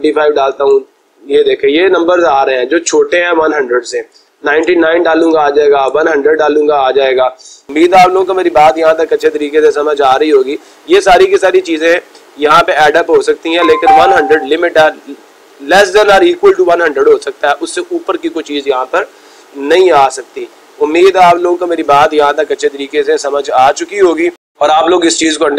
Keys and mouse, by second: 0.0-0.9 typing, 0.1 Return, 1.0 Return, 2.5-3.2 typing, 4.3-5.9 typing, 4.8 Return, 9.8 Return, 19.5 typing, 19.9 Return, 20.7-21.4 typing.